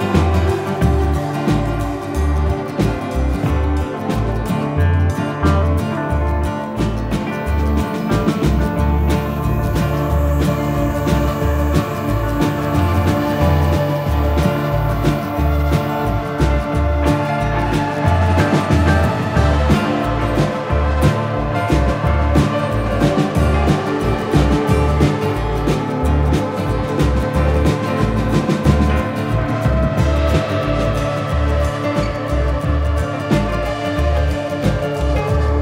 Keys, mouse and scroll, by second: 2.8 middle click, 6.5 Tab, 8.2 shift+d, 9.8 s, 10.9 middle click, 12.7 g, 14.0 middle click, 15.0 Tab, 16.2 middle click, 16.9 shift+middle click, 17.4 scroll down 2, 17.7 middle click, 18.6 right click, 20.3 click, 24.6 click, 26.7 middle click, 31.8 click.